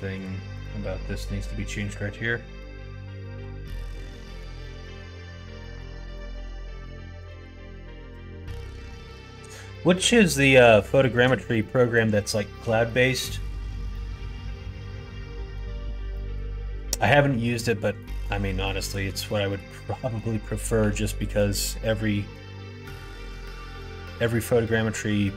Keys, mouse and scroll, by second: 2.5 middle click, 3.9 middle click, 4.5 scroll up 1, 4.6-5.8 middle drag, 6.1 middle click, 6.4 2, 6.7 click, 7.1 shift+click, 8.1 f, 8.3 middle click, 8.8 shift+middle click, 9.7 middle click, 10.3 middle click, 10.9 shift+middle click, 11.5 middle click, 12.2 shift+middle click, 12.8 middle click, 13.9-15.5 middle drag, 16.1 middle click, 17.9 middle click, 18.6 middle click, 19.2 middle click, 19.8 middle click, 20.7 1, 21.3 click, 21.8 middle click, 23.4-25.1 drag, 25.1 middle click.